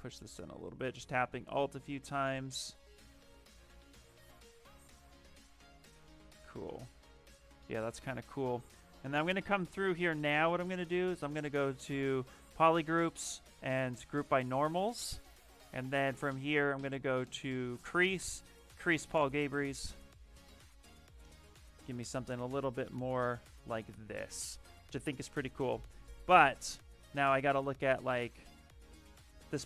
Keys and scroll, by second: 3.8 d, 4.2 shift+f, 6.0 shift+d, 20.7 shift+f, 24.5 shift+f, 29.1 d.